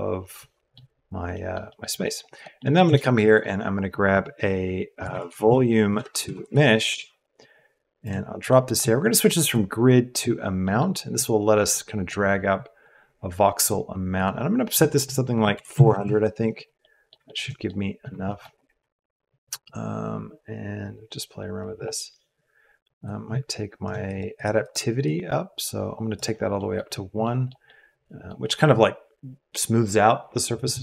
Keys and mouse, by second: 1.3 middle click, 1.7 middle click, 1.9 middle click, 2.3 middle click, 2.8 shift+a, 6.4 Down, 8.4 click, 9.4-10.2 drag, 10.7 click, 11.2 click, 12.9 click, 14.1-16.0 drag, 15.8 KP_0, 16.8 click, 17.2 shift+click, 17.7 middle click, 18.0 middle click, 18.2 shift+click, 18.8 middle click, 19.6-21.6 drag, 23.1 shift+click, 24.1 click, 25.2 click, 26.5 drag, 27.2 middle click, 27.4 click, 27.6 click, 27.8 middle click, 27.9 middle click, 27.9 right click, 28.4 middle click.